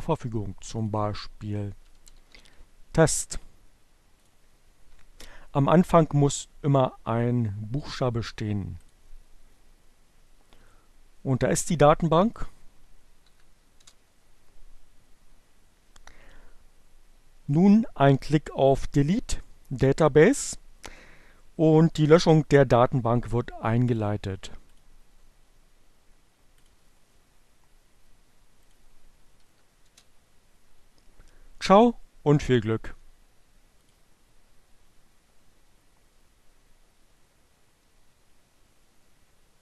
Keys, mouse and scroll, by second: 0.5 click, 1.8 e, 3.9 click, 7.2 click, 12.2 click, 12.5 Up, 13.1 Return, 17.3 click, 23.9 click, 26.0 click, 28.5 click, 28.7 Up, 29.1 Return, 32.7-33.7 drag.